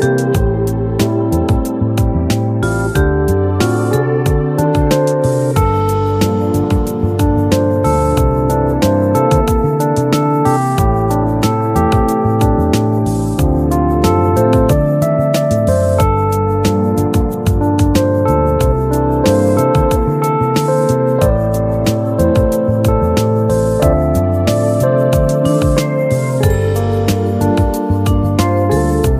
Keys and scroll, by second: 20.4 ctrl+k.